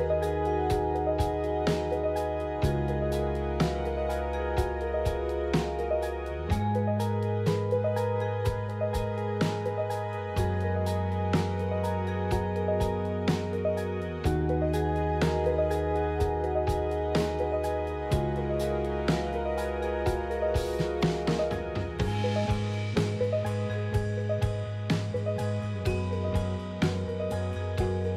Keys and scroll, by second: 2.8 Return, 5.1 f, 9.0 Return, 10.3 Return, 13.4 f, 14.4 p, 15.6 f, 21.8 f.